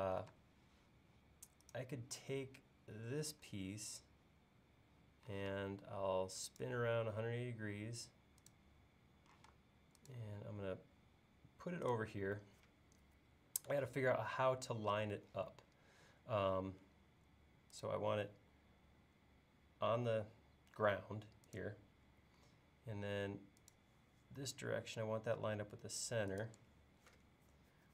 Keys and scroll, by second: 0.3 space, 5.4 m, 9.4 m.